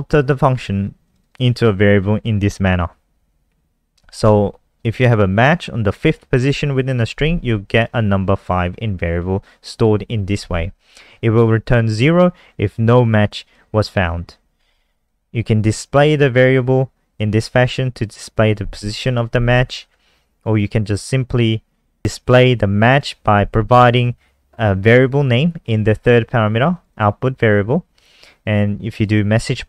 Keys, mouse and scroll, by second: 1.0 click, 1.2 click, 12.5 click, 19.8 scroll down 1, 22.2 click, 26.9 click, 28.4 click.